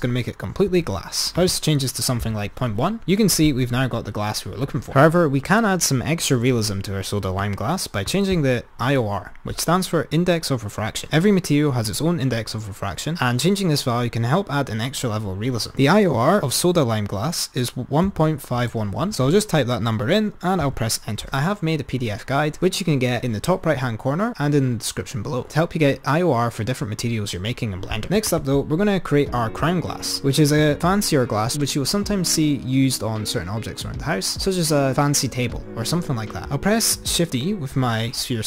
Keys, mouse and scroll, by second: 1.4-3.8 drag, 7.3 click, 15.9 click, 28.3 click, 37.6 shift+d.